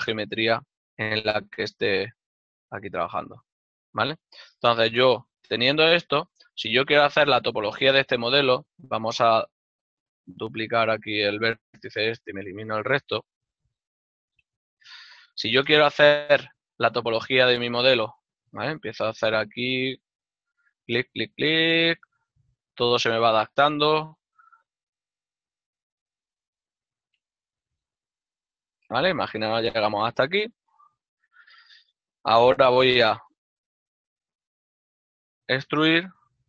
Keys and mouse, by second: 1.2 click, 4.3 middle click, 13.0 shift+d, 13.3 right click, 14.7 click, 17.6 g, 20.8 ctrl+click, 21.0 shift+middle click, 29.7 shift+right click, 30.2 f, 31.0 ctrl+middle click, 35.3 e.